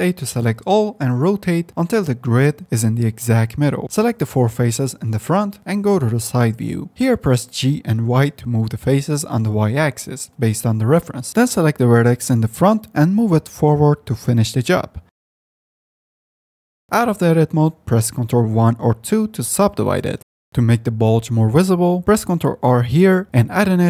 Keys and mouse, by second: 0.0 click, 0.6 Tab, 1.2 a, 2.0 r, 3.8 Tab, 4.0 3, 5.9 middle click, 7.4 g, 11.2 click, 11.8 1, 12.4 click, 13.5 middle click, 13.7 alt+click, 14.6 g, 16.4-17.6 middle drag, 18.1 Tab, 18.5 ctrl+1, 19.2 middle click, 22.7 ctrl+r.